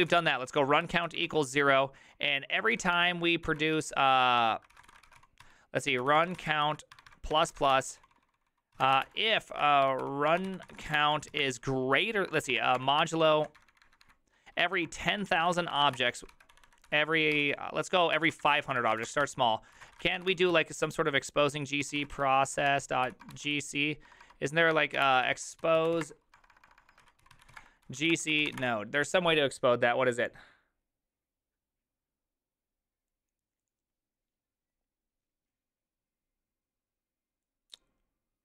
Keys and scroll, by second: 0.0-29.1 typing, 3.4 ctrl+d, 24.8 alt++.